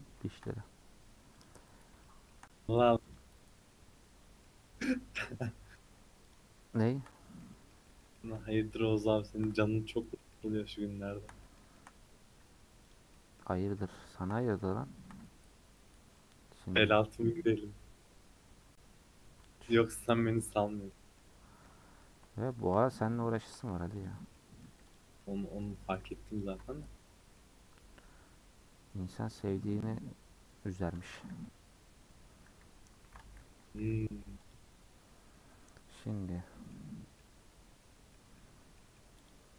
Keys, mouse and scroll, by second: 0.2 shift+middle click, 0.5-1.4 scroll up 1, 1.4 click, 2.0-3.1 shift+middle drag, 3.1 click, 4.2 scroll down 1, 4.4-6.3 middle drag, 6.3 alt+click, 7.1-8.5 middle drag, 8.5 scroll up 2, 8.8 middle click, 9.5-9.9 scroll down 2, 10.2-11.9 middle drag, 11.9-12.6 scroll up 7, 13.1-15.2 middle drag, 16.1 scroll down 1, 16.2-19.2 middle drag, 20.5-20.9 scroll down 7, 20.9 middle click, 21.3-21.6 scroll up 3, 21.6-24.0 shift+middle drag, 24.0 alt+click, 24.3 middle click, 24.9 alt+click, 25.2-26.4 middle drag, 26.4 alt+shift+click, 27.3-30.4 middle drag, 30.7-31.0 scroll down 2, 31.0 a, 31.3 y, 32.5-33.0 scroll down 1, 33.0 ctrl+z, 35.3 u, 35.8 scroll down 1, 35.9 middle click, 36.3-36.6 scroll up 5, 36.7 middle click, 37.3-38.1 scroll up 1, 38.1 middle click, 38.3-38.8 scroll down 6, 38.8 middle click, 39.3 click.